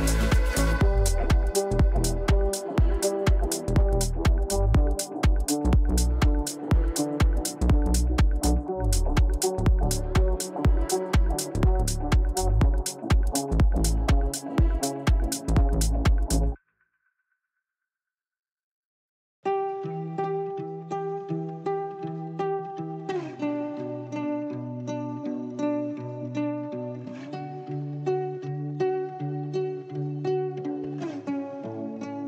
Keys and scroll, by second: 10.3 Insert, 11.9 Delete, 13.3 shift+Page_Up, 15.5 c, 31.1 Right.